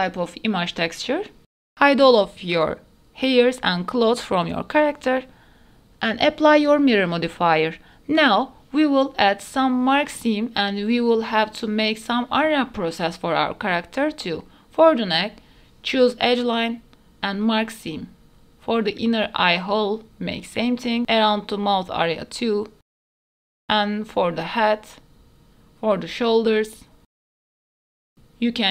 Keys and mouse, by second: 0.5 middle click, 1.7 click, 2.0 shift+middle click, 2.2 middle click, 2.5 click, 2.8-4.6 drag, 4.6 middle click, 4.9 click, 5.0 shift+middle click, 5.2 middle click, 5.5 ctrl+s, 6.8 click, 8.2 middle click, 8.9 click, 9.3 Tab, 9.5 shift+middle click, 10.7 middle click, 10.9 2, 11.2 shift+middle click, 11.6 alt+middle click, 11.8-12.8 middle drag, 13.3 middle click, 14.0 middle click, 14.3 click, 15.1 shift+middle click, 16.6 alt+click, 17.4 middle click, 17.7 shift+middle click, 18.6 alt+click, 19.6 middle click, 20.5 middle click, 21.1 middle click, 21.4 middle click, 22.3 middle click, 22.8 ctrl+click, 23.2 shift+middle click, 23.3 middle click, 23.9 middle click, 24.7 middle click, 25.2 ctrl+click, 25.4 middle click, 25.7 middle click, 26.3 shift+middle click, 26.6 middle click, 26.8 shift+middle click, 27.0 middle click, 27.6 middle click, 28.3 middle click.